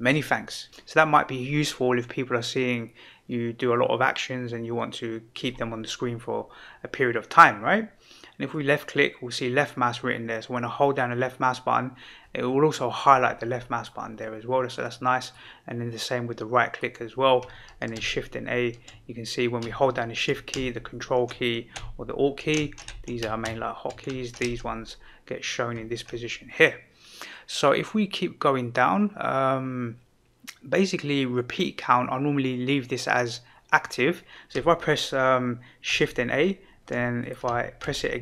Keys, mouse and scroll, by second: 8.5-13.8 drag, 15.3 right click, 17.9 shift+a, 35.8 shift+a, 37.8 shift+a.